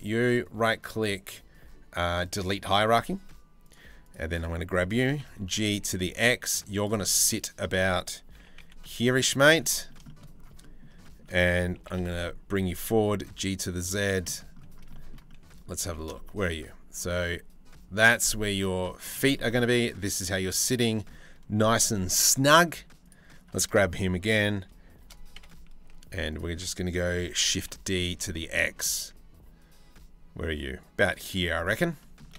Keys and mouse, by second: 4.6 g, 6.6-7.7 middle drag, 8.0 g, 9.2 middle click, 9.7 shift+middle click, 10.2 middle drag, 10.6 middle click, 11.7 g, 12.4 g, 13.9 click, 14.5 shift+middle click, 14.9 middle click, 15.4 g, 18.9 click, 19.4-20.7 drag, 25.0 KP_8, 25.0 KP_7, 25.5 z, 27.1 shift+d, 31.0 z, 31.6 middle click.